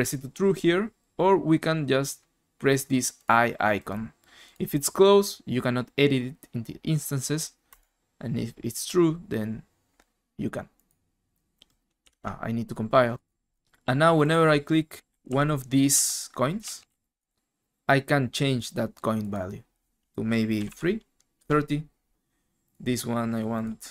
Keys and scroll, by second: 12.1 alt+Tab, 14.8-17.4 typing, 20.3-21.0 typing, 21.3 Return.